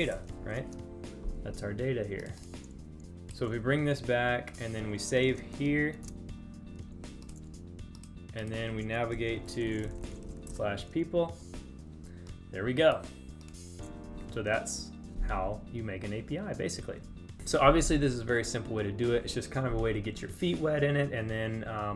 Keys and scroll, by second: 5.4 super+s.